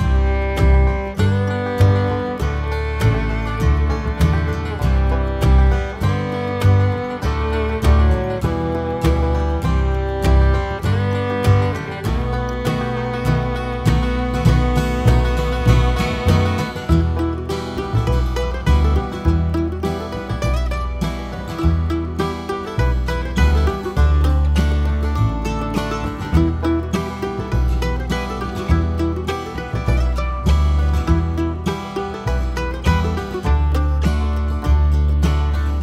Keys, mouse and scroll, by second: 1.0 click, 3.8 click, 5.8 click, 6.0 scroll up 1, 7.0 `, 7.4 click, 7.8 `, 9.2-18.8 drag, 12.4 scroll up 1, 13.4 `, 16.4 `, 22.6 ctrl+shift+click, 25.5 scroll down 1, 25.6 `, 27.0-28.8 scroll up 4, 27.2 `, 28.8 click.